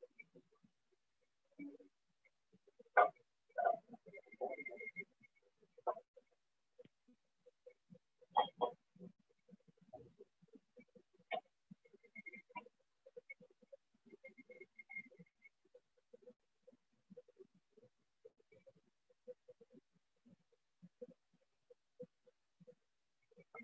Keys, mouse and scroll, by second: 1.9 click, 5.9 alt+click, 6.9 alt+click, 7.9 alt+click, 8.9 alt+click, 9.9 alt+click, 10.9 alt+click, 14.9 click, 17.9 alt+click, 18.9 alt+click, 19.9 alt+click, 20.9 alt+click, 22.9 click.